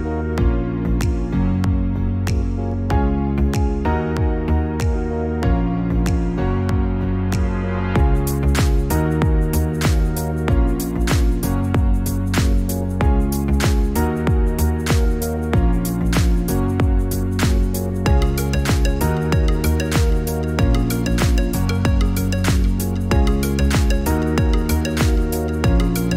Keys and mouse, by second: 14.4 click, 24.4-26.1 typing.